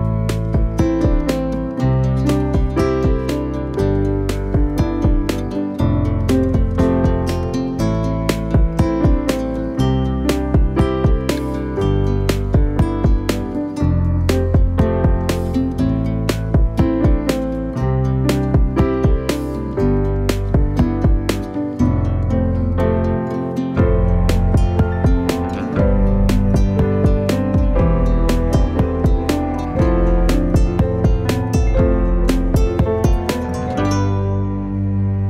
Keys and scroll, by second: 12.2 ctrl+t, 20.3 ctrl+d, 21.1 v, 28.6 shift+Left, 30.3 Down, 32.4 Down, 33.8 Up.